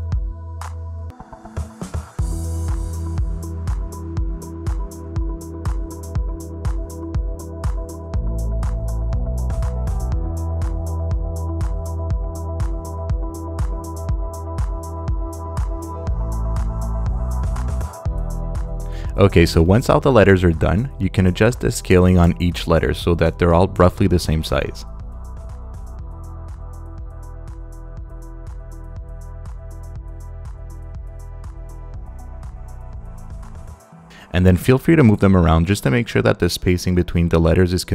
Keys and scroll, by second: 7.1 Left, 9.4 super+z, 24.6 super+z, 37.5 Down.